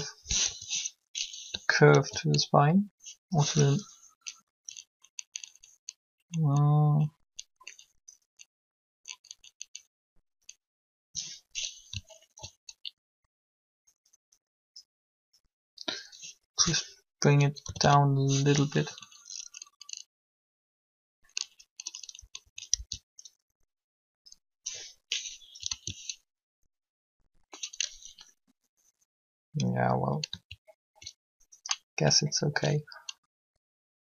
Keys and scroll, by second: 1.7 3, 17.5 a, 17.8 a, 21.9 Up, 22.5 Down, 25.6 alt+a.